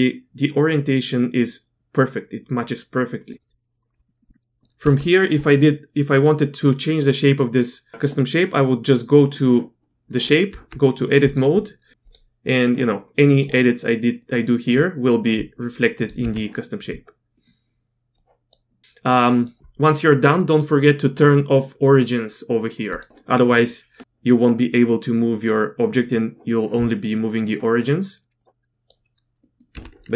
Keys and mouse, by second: 4.1 middle click, 4.3 middle click, 4.8 Tab, 7.2 click, 8.4 click, 10.5 Tab, 11.9 a, 11.9 r, 11.9 g, 12.1 click, 13.4-16.0 drag, 16.2 Tab, 17.4 click, 18.1 click, 18.8 ctrl+z, 22.9 click, 28.4 click, 29.4 click, 29.7 Tab.